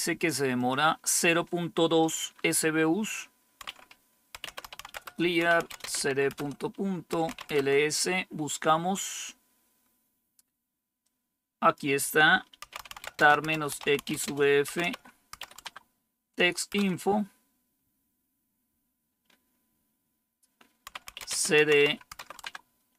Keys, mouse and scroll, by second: 0.5 click, 3.6-7.8 typing, 10.9 click, 12.4-15.8 typing, 16.7 Return, 19.1 typing, 20.6-22.6 typing.